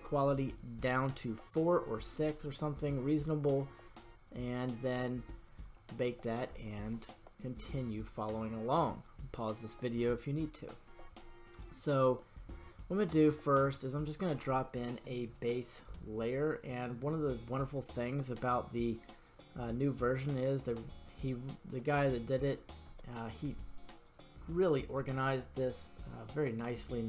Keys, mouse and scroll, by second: 5.4 click, 12.4 click, 16.5-17.7 scroll down 2, 18.8-27.0 drag.